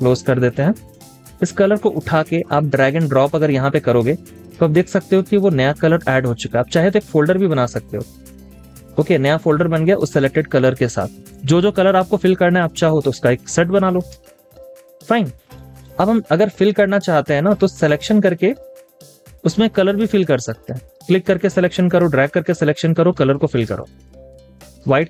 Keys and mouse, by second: 14.0 space, 14.1 double click, 14.5 space, 15.2 double click, 23.5 space, 24.2 double click, 24.3 space.